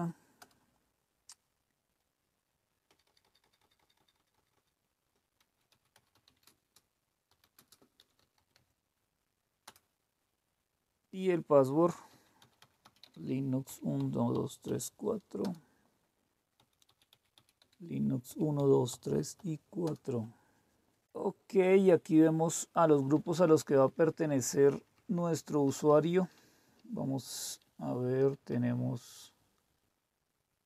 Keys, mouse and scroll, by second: 0.4 Return, 2.9-9.0 typing, 9.6 Return, 11.9-15.1 typing, 15.4 Return, 16.3-19.3 typing, 19.8 Return, 22.9 Down, 23.0 Down, 23.2 Down, 23.4 Down, 23.6 Down, 23.8 Down, 24.0 Down, 24.2 Down, 24.3 Down, 24.5 Down, 24.7 Down, 24.9 Down, 25.1 Down, 25.3 Down, 25.5 Down, 25.9 Down, 26.1 Down, 26.6 Down, 27.2 Down, 27.6 Down, 27.8 Down, 28.0 Down, 28.2 Down, 28.5 Up, 29.1 Up, 29.1-30.6 Up.